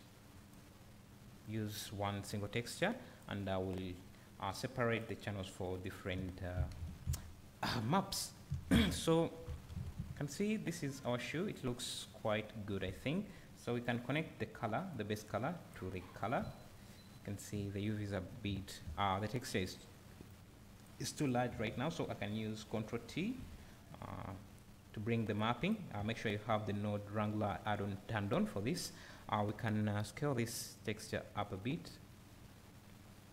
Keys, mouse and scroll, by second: 1.4 click, 2.2 click, 2.7 click, 4.6-8.1 drag, 6.2 `, 8.1-9.0 scroll up 1, 9.0 `, 9.5 scroll down 1, 9.8 alt+a, 10.0 `, 13.0 scroll up 1, 13.9-20.4 drag, 16.4 `, 21.2 click, 23.1 ctrl+t, 24.1 `, 30.4-33.3 drag.